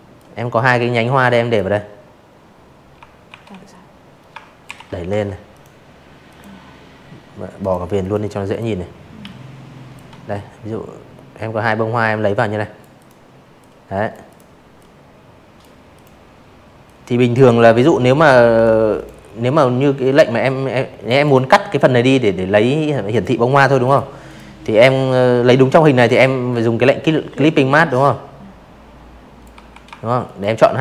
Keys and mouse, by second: 0.2 shift+x, 1.6 ctrl+shift+], 2.0 v, 2.5 click, 3.2 click, 4.5 click, 5.0 click, 5.4 click, 6.2 alt+click, 8.9 click, 9.9 drag, 10.6-11.1 drag, 11.2 click, 11.7-12.5 drag, 12.9 click, 13.8-14.2 drag, 14.7 click, 15.9 click, 16.7-18.0 drag, 18.2 click, 20.0 click, 20.8 click, 21.2 click, 21.7 m, 23.0-26.4 drag, 26.5 v, 27.2 shift+click, 28.2 shift+click, 29.9 right click.